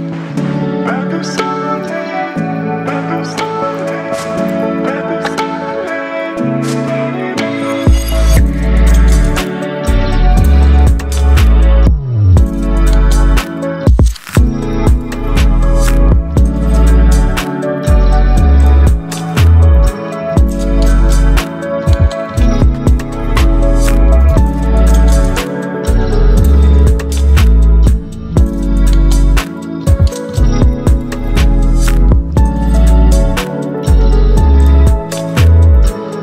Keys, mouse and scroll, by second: 2.1 right click, 3.4-6.7 drag, 13.3 click, 15.7 ctrl+0, 17.4-20.8 drag, 21.2 alt+scroll up 1, 22.8 alt+scroll up 1, 23.7-24.4 drag, 25.1 ctrl+t, 26.1 right click, 27.3 click, 29.5-31.7 alt+drag, 32.6-36.2 alt+drag.